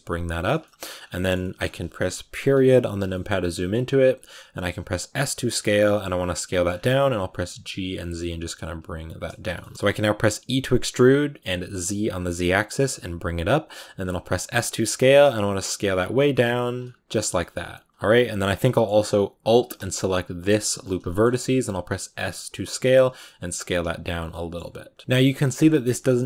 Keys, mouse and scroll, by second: 0.5 shift+middle click, 0.8 scroll up 3, 1.1-2.2 shift+middle drag, 2.2 KP_Decimal, 3.0 middle click, 3.3-4.4 scroll up 1, 4.5 s, 6.3 middle click, 6.5 scroll up 5, 7.1 g, 8.6 s, 9.4 shift+middle click, 9.7 scroll up 1, 10.2 e, 13.8 s, 16.3 s, 16.8 Tab, 17.0 middle click, 17.1 scroll down 1, 17.2 middle click, 17.9 Tab, 18.3 shift+middle click, 18.8-20.2 scroll up 1, 20.2 scroll up 1, 20.3 alt+right click, 21.0 middle click, 21.1-21.4 scroll up 3, 21.5 s, 23.0 scroll down 1, 23.1 middle click, 23.5 Tab, 23.7 s, 24.0 scroll down 3, 24.2-25.4 middle drag, 25.4-26.1 scroll up 3, 26.1 middle click.